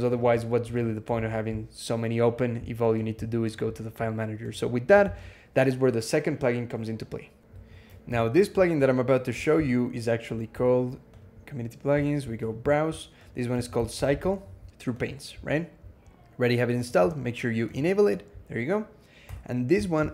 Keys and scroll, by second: 1.0 alt+x, 4.9 alt+x, 7.4 super+e, 7.9 ctrl+,, 13.1-14.5 typing, 19.1 Escape.